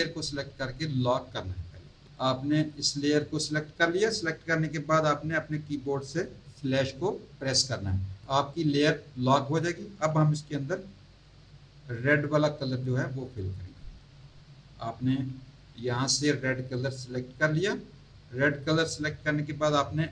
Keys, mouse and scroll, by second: 2.1 click, 3.2 click, 12.5 click, 16.7 click.